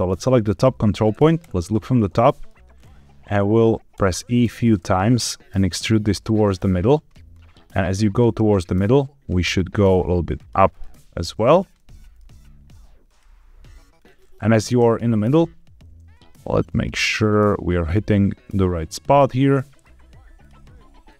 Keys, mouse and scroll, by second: 0.1 shift+middle click, 1.3 KP_7, 2.2 shift+middle click, 2.7-3.1 scroll up 2, 3.9 e, 4.5 click, 4.7 e, 6.0 click, 6.3 e, 6.7 click, 7.0-8.3 middle drag, 9.4 click, 9.7 g, 9.8 z, 10.3 click, 10.6 click, 10.8 g, 10.9 z, 11.4 click, 11.7 middle click, 12.2 e, 13.0 click, 13.2 e, 13.9 click, 14.1 middle click, 14.7 KP_7, 16.0 g, 17.1 click, 17.7 click, 18.3 g, 18.8 click, 19.1 middle click, 20.3 click, 21.0 click.